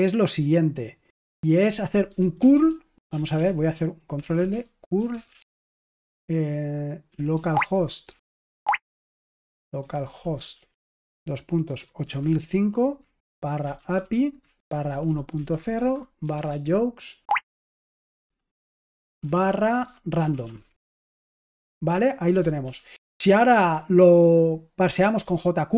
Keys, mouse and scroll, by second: 1.8-3.2 typing, 4.1 ctrl+l, 4.4-5.7 typing, 7.0-8.4 typing, 7.5 Tab, 9.7-21.4 typing, 22.6 ctrl+p, 23.1 space, 23.4 |, 24.8-25.7 typing.